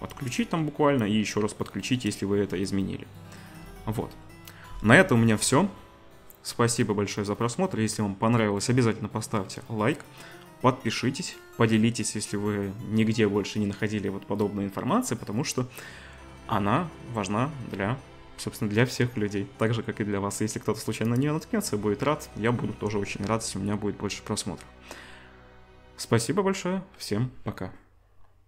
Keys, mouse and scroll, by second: 0.1-21.3 drag, 5.2-28.4 middle drag.